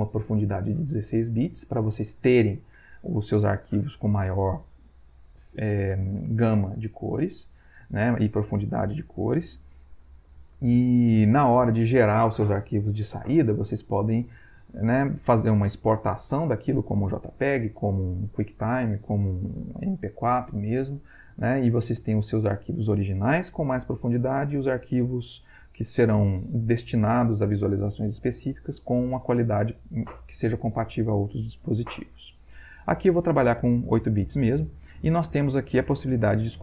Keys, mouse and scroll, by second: 33.6 click, 35.8-36.6 drag.